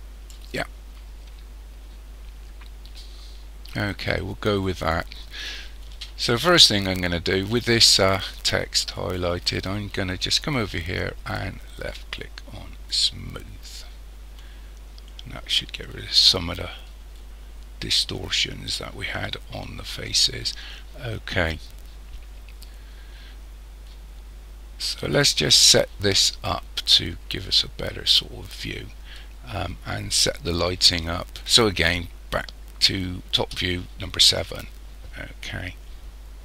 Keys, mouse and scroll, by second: 0.3 click, 12.9 click, 33.4 KP_7, 35.1-36.2 scroll down 3, 36.2-36.4 scroll down 3.